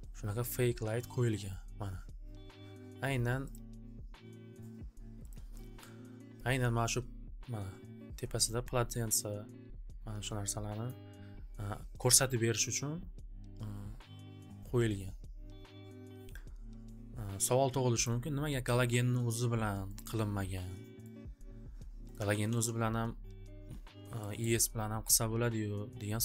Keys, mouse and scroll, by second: 3.5 click, 5.4 click, 9.3-10.3 drag, 10.9 click, 12.4 click, 12.6 click, 18.0 click, 20.0 click, 21.0 click, 22.1 click, 22.4 alt+w, 22.4 alt+w, 24.4 scroll.